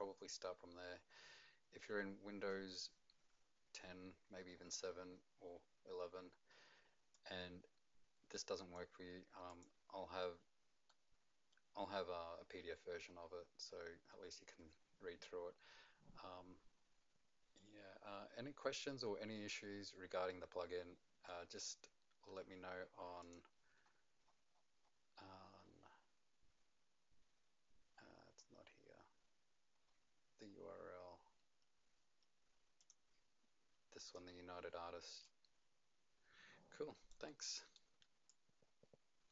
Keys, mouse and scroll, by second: 1.1-1.9 scroll down 8, 1.9-5.0 scroll up 5, 7.1 click, 9.5 click, 10.9 middle click, 19.5 right click, 23.2 click, 23.9-25.4 scroll up 15, 25.4-26.2 scroll down 7, 25.6 click, 27.9-28.5 scroll down 4, 28.5-29.2 scroll down 3, 30.0 click, 30.0 scroll down 7, 30.6-30.9 scroll down 1, 30.9-32.8 scroll up 1, 32.8 click, 34.0 click, 35.2 click.